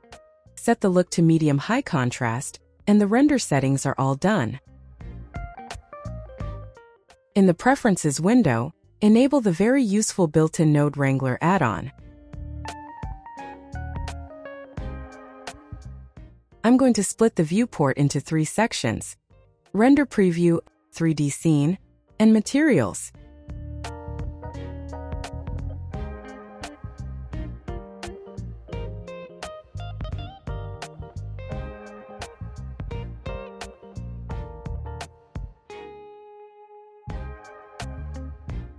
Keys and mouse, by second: 0.0 click, 0.9 click, 2.1-2.9 drag, 5.2-6.2 drag, 16.5-17.3 right drag, 17.9 click, 19.2 click, 20.3 click, 22.3 shift+a, 24.5 KP_0, 27.9 click, 29.1 click, 30.0 click, 31.1 n, 35.5 click, 38.4-38.7 drag.